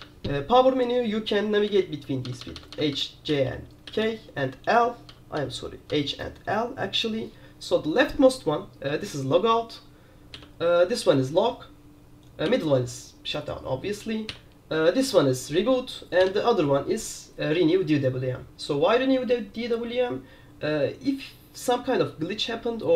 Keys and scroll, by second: 1.6-7.1 typing, 10.5 l, 12.6 l, 14.4 l, 16.3 l.